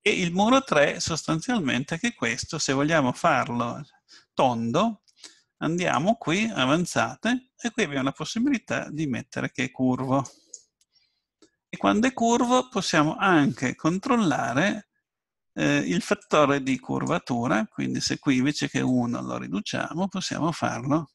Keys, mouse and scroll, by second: 0.1-2.8 middle drag, 5.8-7.7 drag, 10.3-12.0 drag, 11.8-13.7 middle drag, 16.2-18.1 drag, 18.9-20.8 drag.